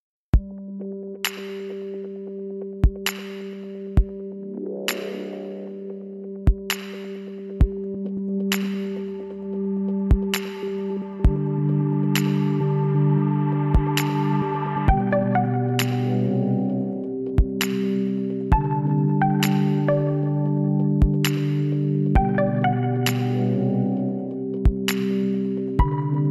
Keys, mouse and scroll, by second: 0.4-3.9 middle drag, 4.5-7.2 middle drag, 7.9-9.8 drag, 8.8-12.9 right drag, 12.2 a, 12.5 click, 12.9 middle click, 15.5 KP_1, 16.7 shift+a, 19.6 middle click, 20.1-21.4 middle drag, 21.4 s, 23.6-26.3 middle drag.